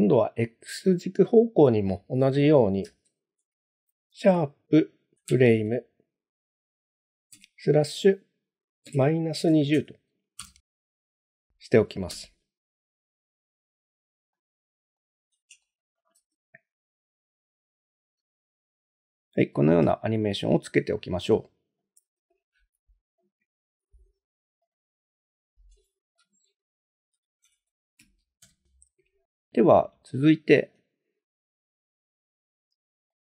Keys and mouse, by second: 1.3-11.1 drag, 12.1 space, 13.7 space, 14.3-15.0 middle drag, 15.6-16.0 shift+middle drag, 16.2 space, 18.2 space, 19.1-19.4 middle drag, 19.9 shift+middle click, 20.8-21.1 middle drag, 21.8 shift+middle drag, 22.4 click, 24.7 click, 27.1 F2, 29.6 click, 30.2-30.5 shift+middle drag, 31.9 click, 33.2 click.